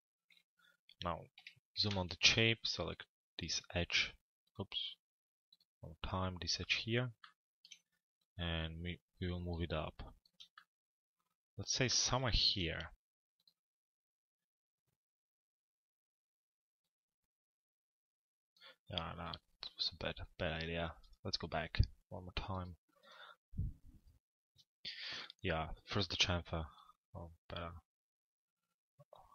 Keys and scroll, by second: 1.4 z.